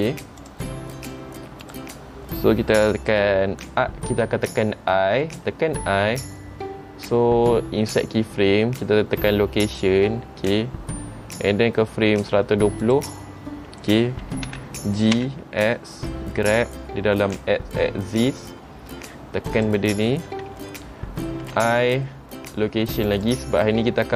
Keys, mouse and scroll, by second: 1.8 click, 13.0 click, 14.6 g.